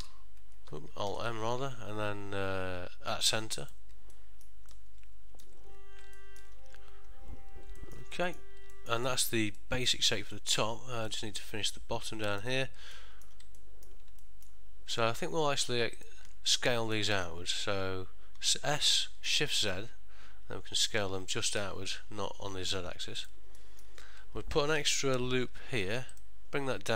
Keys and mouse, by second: 0.1 alt+n, 1.2 alt+m, 4.3 middle click, 4.8 ctrl+middle click, 6.3 middle click, 8.0 ctrl+middle click, 8.3 middle click, 8.8 ctrl+middle click, 9.2 shift+middle click, 9.7 middle click, 10.5 middle click, 11.2 ctrl+middle click, 12.4 alt+click, 13.1 middle click, 13.7 ctrl+middle click, 14.3 shift+middle click, 15.1 ctrl+middle click, 16.2 alt+shift+click, 18.5 s, 23.7 middle click, 25.6 ctrl+r.